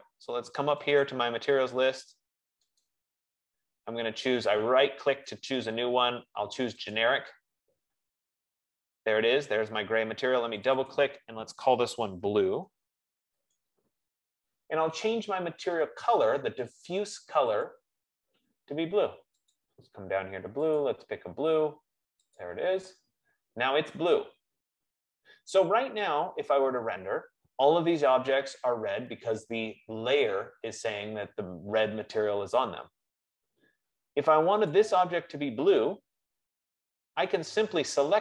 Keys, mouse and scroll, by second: 1.2 click, 3.0 right click, 4.3 F15, 6.0 right click, 8.0 click, 12.0 click, 13.0 ctrl+a, 13.0 b, 14.0 typing, 18.0 click, 20.0 click, 22.0 click, 23.0 click, 35.1-38.2 drag.